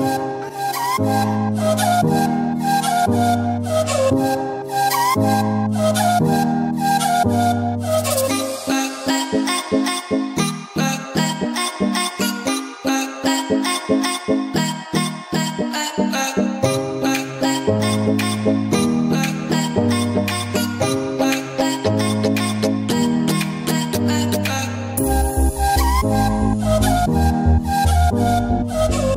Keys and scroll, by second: 0.3 ], 2.6 ], 3.6 ], 4.5 ], 6.8 ctrl+s, 8.2 ], 9.2 ], 10.6 ], 13.1 [, 14.4 [, 16.0 [, 16.3 ], 19.2 ], 20.0 [, 23.3 ], 28.9 [.